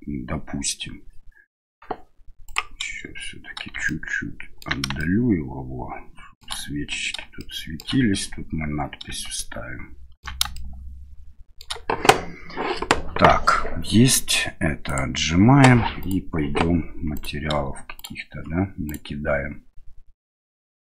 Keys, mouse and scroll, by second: 2.5 click, 3.9 ctrl+middle click, 5.0-6.4 shift+middle drag, 7.4 shift+middle click, 9.4 ctrl+middle click, 10.5-11.7 shift+middle drag, 14.9 click, 16.0 right click, 17.1 right click, 18.0 right click, 18.9-20.0 right drag.